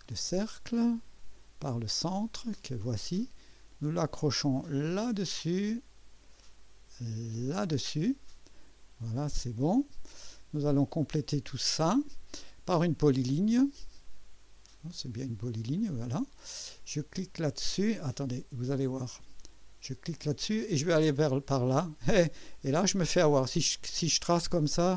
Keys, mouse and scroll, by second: 0.1 click, 2.1 click, 5.0 click, 7.5 click, 8.8 scroll up 2, 9.3 right click, 10.5 scroll up 1, 10.9 right click, 15.8 click, 18.2 right click, 20.1 click.